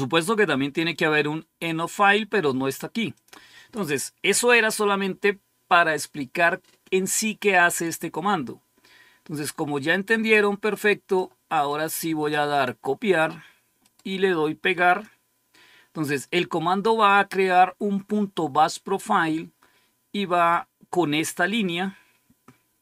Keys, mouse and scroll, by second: 3.1 click, 7.6 click, 9.3-11.1 drag, 11.6 click, 12.4 click, 13.8 right click, 14.8 click.